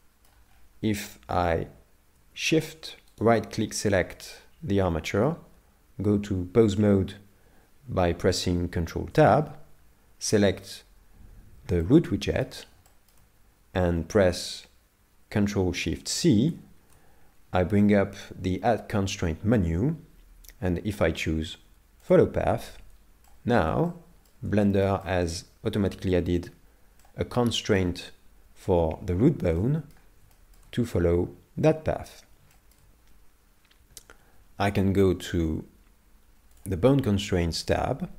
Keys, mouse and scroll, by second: 0.5 scroll up 1, 1.2 scroll up 3, 3.2 shift+right click, 3.9 middle click, 9.1 ctrl+Tab, 10.5 right click, 11.8 middle click, 12.9 shift+middle click, 16.5 ctrl+shift+c, 23.3 shift+middle click, 23.9 middle click, 24.6 shift+middle click, 25.0 middle click, 30.3 middle click, 30.5 shift+middle click, 36.6 click.